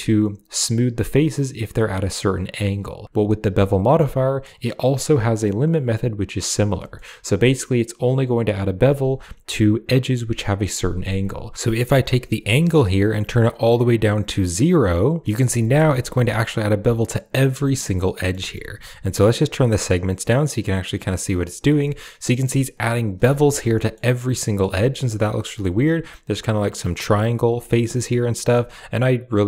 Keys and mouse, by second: 6.6 shift+middle drag, 11.5 ctrl+z, 12.7-15.0 shift+drag, 15.4 shift+middle drag, 17.5 middle click, 17.9 middle drag, 18.2 shift+middle click, 19.4 click, 20.2 click, 20.4 click, 20.6 click, 20.8 click, 21.0 click, 21.7 middle click, 23.2 Tab, 23.6 middle click, 24.3 middle click, 24.5 Tab, 25.3 middle click, 27.5-27.8 middle drag, 27.9-29.4 middle drag.